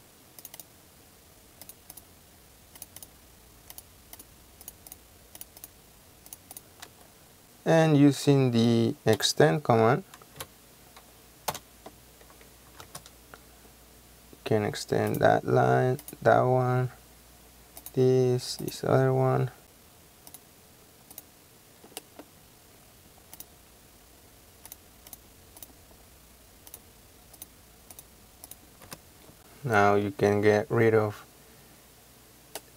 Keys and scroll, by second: 6.9 space, 9.3 typing, 10.5 typing, 11.6 Return, 12.9 space, 28.8 space.